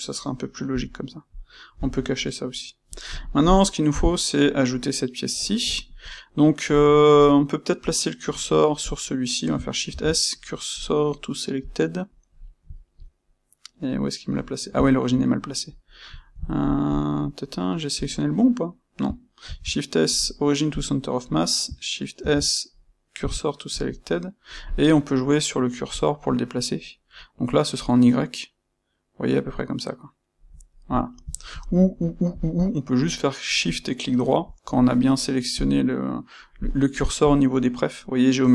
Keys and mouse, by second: 0.6 h, 1.2 click, 1.7 h, 2.1-2.8 middle drag, 2.8 click, 3.0-8.8 shift+middle drag, 3.8 KP_1, 8.8 click, 9.8 shift+s, 12.7-15.6 ctrl+middle drag, 15.6 click, 16.1-16.8 ctrl+middle drag, 16.8 click, 17.2-25.9 middle drag, 19.4 shift+s, 22.2 shift+s, 25.9 click, 27.7-30.9 drag, 30.9-34.0 middle drag, 34.0-35.5 shift+right drag, 35.5-37.2 drag.